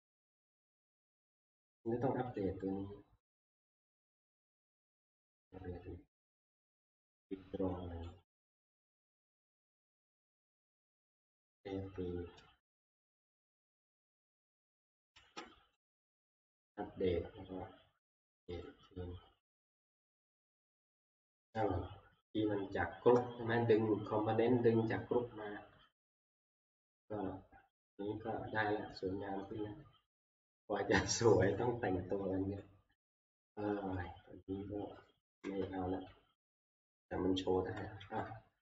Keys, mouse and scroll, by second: 0.4 click, 0.6 click, 1.5 middle click, 1.8 click, 2.4 click, 3.6 right click, 8.2 click, 10.2 click, 10.9 click, 11.4 ctrl+s, 12.6 alt+Tab, 13.5 alt+Tab, 13.8 alt+Tab, 15.2 scroll, 15.9 right click, 18.7 click, 27.9 scroll, 29.5-32.7 scroll, 32.9 scroll, 33.3 middle click, 33.3 middle click, 33.4 middle click, 34.1 click, 34.9 middle click, 35.0 middle click, 35.0 middle click, 35.4 Delete, 36.0-38.6 scroll.